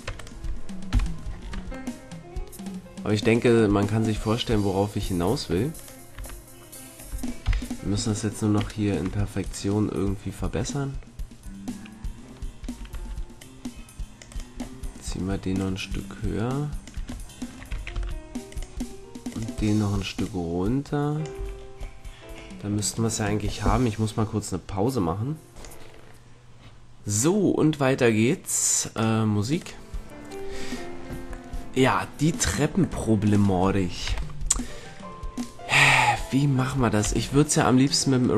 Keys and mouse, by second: 0.0 Tab, 0.8 KP_Decimal, 1.4 Tab, 6.1 Tab, 7.4 KP_3, 12.6 a, 12.9 c, 14.6 right click, 15.5 middle click, 16.4 right click, 17.2-18.9 middle drag, 17.7 a, 17.9 c, 20.2-22.8 drag, 21.3 a, 30.2 click, 34.2 KP_3, 37.2 c.